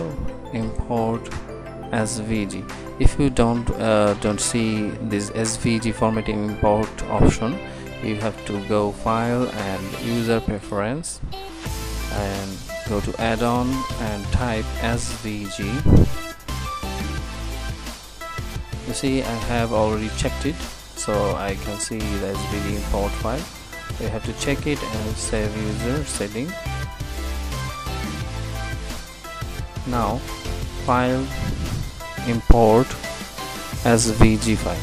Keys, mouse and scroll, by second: 30.9-32.8 drag.